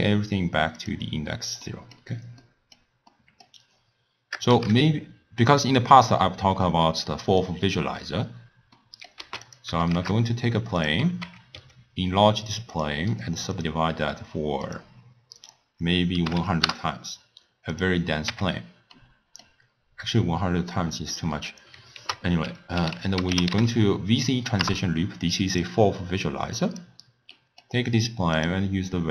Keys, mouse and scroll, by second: 0.8 click, 1.6-4.6 middle drag, 4.6 shift+a, 7.4 shift+a, 8.8 middle click, 9.2 x, 9.9 shift+a, 10.9 shift+a, 11.2 Tab, 11.6 s, 13.2-14.7 right drag, 14.7 click, 15.4-16.4 drag, 16.4 0, 17.7 click, 18.3 Tab, 19.0-22.0 middle drag, 26.7 click, 27.4-28.4 middle drag, 28.4 drag.